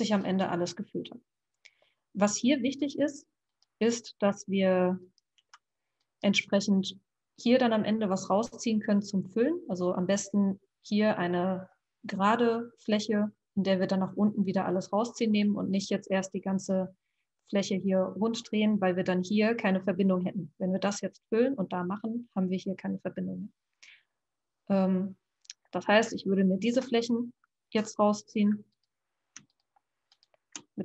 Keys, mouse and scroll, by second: 2.6 e, 4.2 r, 5.3 g, 26.9-28.0 middle drag, 28.0 click, 28.7 click, 29.5 shift+click, 30.0 shift+click.